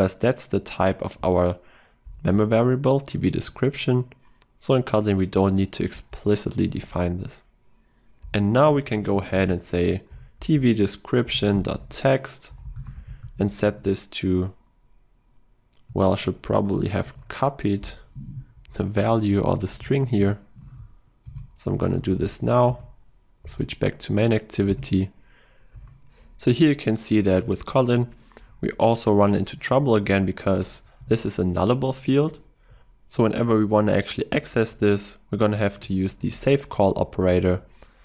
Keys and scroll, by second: 2.1 alt+Return, 10.1 Return, 17.1 ctrl+e, 19.1 ctrl+z, 19.9 ctrl+w, 21.3 ctrl+w, 21.7 ctrl+c, 22.7 ctrl+y, 22.9 ctrl+e, 24.8 ctrl+v, 31.1 ctrl+w.